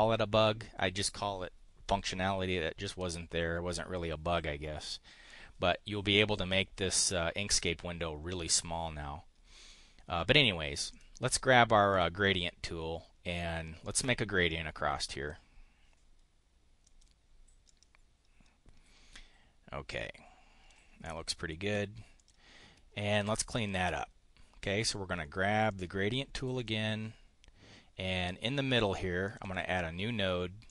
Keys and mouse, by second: 10.9 click, 11.9 click, 13.8-15.4 drag, 16.8 click, 17.6-18.8 drag, 19.2-20.8 drag, 22.2 click, 25.7 click, 26.6 click, 29.3 click, 30.6 click.